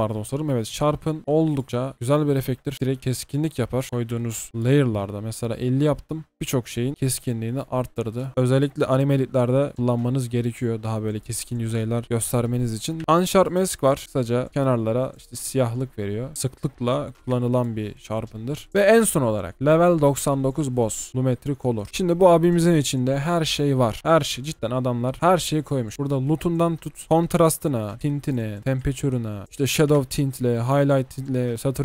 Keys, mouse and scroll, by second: 0.0 ctrl+b, 0.5-1.2 typing, 8.4 typing, 8.8 double click, 13.0 typing, 18.7 ctrl+BackSpace, 20.6-21.1 typing.